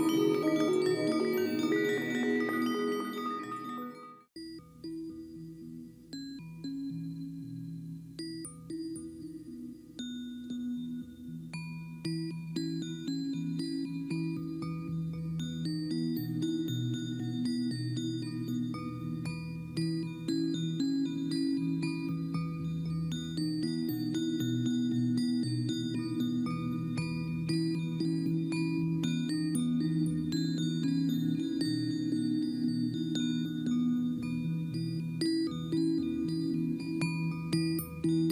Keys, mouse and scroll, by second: 25.9 right click, 33.7 ctrl+t.